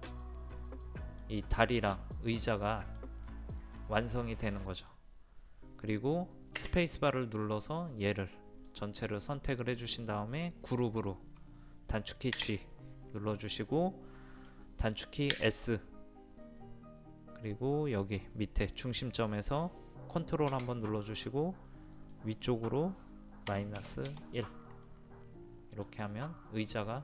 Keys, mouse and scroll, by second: 4.1 scroll down 1, 4.2 scroll up 1, 4.4 scroll down 1, 4.6 middle click, 7.3 space, 7.6-9.3 drag, 12.4 a, 13.3 middle click, 15.4 s, 22.0 click, 23.8 KP_1, 24.8-27.0 middle drag.